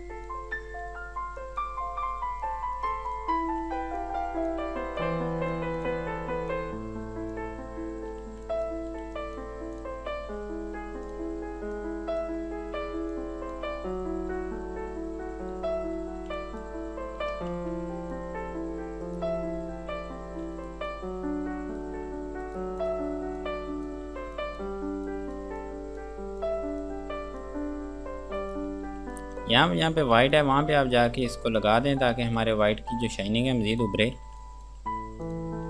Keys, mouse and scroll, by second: 0.0 click, 0.9 scroll down 1, 1.3 F2, 1.6 click, 3.0 right click, 3.3 click, 8.1 scroll down 1, 8.4 F2, 8.7 click, 9.2 F2, 9.4 click, 14.6 KP_Add, 15.6 F3, 16.6 click, 17.8 ctrl+z, 18.4 click, 19.3 right click, 20.2 scroll down 1, 20.7 F2, 20.9 click, 22.7 right click, 23.0 click, 24.3 F2, 24.6 click, 27.3 scroll down 1, 27.6 click, 28.6 right click, 29.1 F2, 29.4 click, 32.1 scroll down 1, 32.5 Escape, 32.8 F3, 33.6 click, 34.3 F2, 34.6 click.